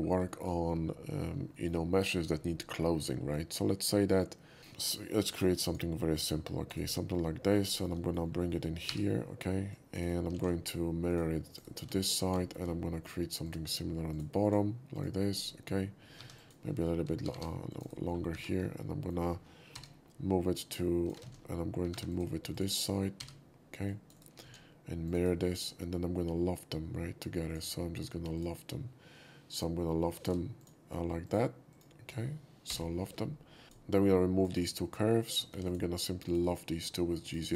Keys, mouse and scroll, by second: 0.3 shift+middle click, 0.7 shift+scroll up 2, 1.5 shift+middle click, 4.6 shift+middle click, 5.3 shift+drag, 5.6 shift+click, 6.1 shift+click, 6.6 shift+right click, 7.0 scroll up 1, 7.2-7.5 shift+middle drag, 7.6 middle drag, 7.9 middle click, 8.5 middle click, 8.9 g, 9.6 g, 9.7 drag, 10.0 right click, 10.3 alt+x, 11.1 alt+click, 11.5 alt+right click, 11.9 alt+middle click, 12.4 shift+middle click, 13.4 shift+click, 14.1 shift+click, 14.4 shift+click, 14.9 shift+click, 15.3 right click, 15.7 middle click, 16.2 1, 16.3 click, 16.7 middle click, 17.0 g, 17.4 g, 17.7 click, 18.3 2, 18.6-19.1 middle drag, 19.7 scroll down 1, 19.7 g, 20.6 click, 21.9 2, 22.1 click, 22.5 click, 23.2 g, 23.8 drag, 24.1 right click, 24.5 alt+x, 25.0 click, 25.6 middle click, 26.0 scroll up 1, 27.5 click, 30.6 shift+click, 31.2 shift+click, 31.7 shift+click, 32.7 l, 33.6 ctrl+z, 33.6 click, 34.4 click, 35.2 click, 35.5 x, 35.7 drag, 36.2 click, 37.2 shift+click.